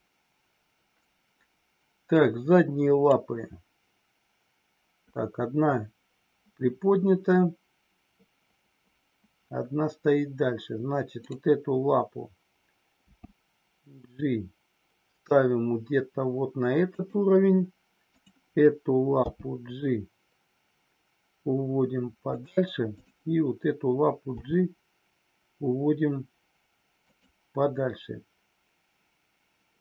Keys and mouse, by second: 2.2 click, 13.0 g, 17.0 click, 18.1 click, 19.2 g, 22.3 click, 23.0 click, 27.1 click.